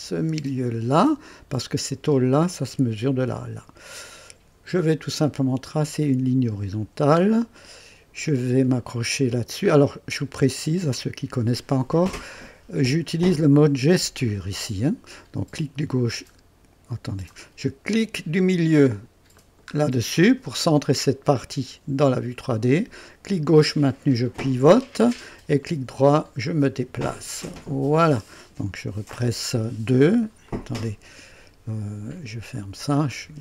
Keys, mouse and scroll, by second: 5.7 click, 6.8-7.1 scroll up 1, 7.6 right click, 13.7 click, 15.1 click, 15.6-17.5 drag, 19.3 middle click, 21.4-25.6 drag, 25.6-28.1 right drag, 29.1 KP_1, 29.7 KP_2, 30.5 click, 32.5 click, 33.2 KP_2.